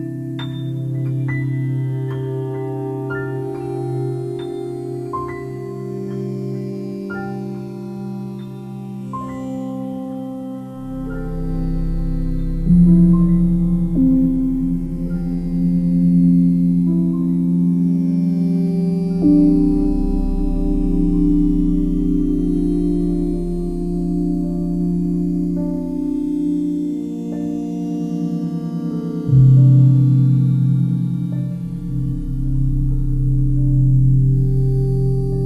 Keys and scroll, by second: 7.7 ctrl+j, 11.8 ctrl+t.